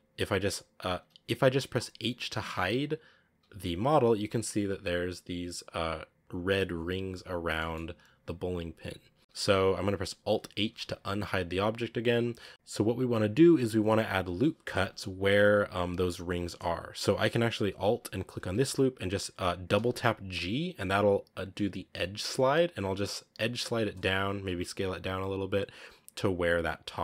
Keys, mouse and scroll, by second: 0.1 z, 0.9-2.7 scroll up 1, 2.7-3.2 scroll down 1, 3.3 h, 3.6-6.0 scroll up 6, 6.0-7.5 scroll down 1, 7.5 shift+middle click, 7.6 scroll down 3, 8.2 scroll up 2, 9.2 alt+h, 10.5 alt+h, 10.9-11.4 scroll down 1, 11.4 right click, 11.7-12.2 scroll up 3, 11.9 right click, 13.4-14.4 scroll down 1, 14.4 scroll up 1, 14.7 Tab, 15.4 z, 16.3-17.9 scroll up 1, 18.2 alt+right click, 19.6 g, 24.3 s.